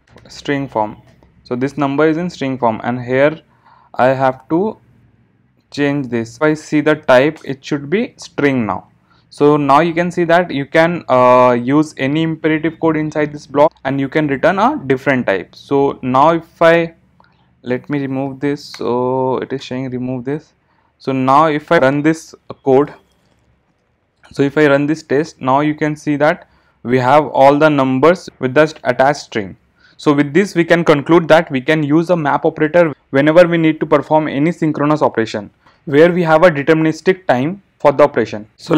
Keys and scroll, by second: 6.3 alt+Return, 18.8 alt+Return, 21.8 ctrl+shift+r.